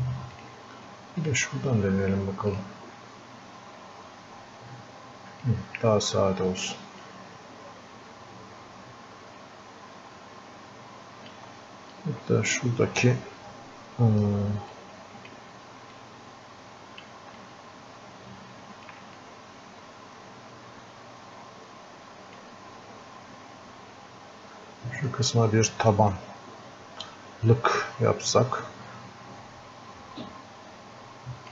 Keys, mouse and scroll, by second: 5.5-12.3 drag, 12.3-13.0 scroll up 2, 13.0-14.0 scroll up 1, 14.0-14.5 scroll up 1, 14.7 click, 15.9-17.4 drag, 17.4-19.2 alt+drag, 19.2-24.8 drag, 26.2-31.5 drag.